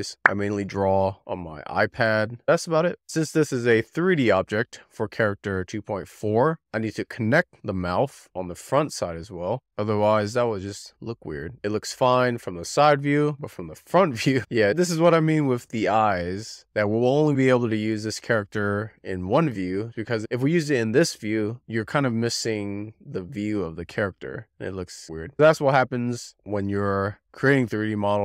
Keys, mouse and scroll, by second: 0.0 middle click, 0.7-3.3 middle drag, 3.3 scroll down 1, 3.6-4.9 middle drag, 4.9-5.4 scroll up 5, 5.4 middle click, 5.7 click, 5.9 z, 6.0 click, 6.3 z, 6.4 click, 6.6 middle click, 7.2 scroll down 1, 7.3 click, 7.6 z, 7.9 click, 8.2 middle click, 8.7 scroll up 4, 8.8 click, 9.2 scroll down 4, 9.3 middle click, 9.5-10.2 scroll up 2, 9.6 middle click, 10.2 f, 10.4 click, 10.7 click, 11.1 z, 11.3 click, 11.5-14.4 shift+middle drag, 14.4-14.8 scroll down 2, 14.8 scroll up 1, 15.0 alt+middle click, 15.1 scroll down 1, 15.1-16.4 alt+middle drag, 16.4 scroll down 1, 16.6 middle click, 18.2-18.5 scroll up 3, 19.5-20.1 scroll down 4, 20.6 alt+z, 20.9 scroll up 4, 21.1 Tab, 22.2 alt+z, 26.0 click, 26.4 scroll down 1, 26.6 3, 27.1 scroll down 1, 27.2-28.2 middle drag.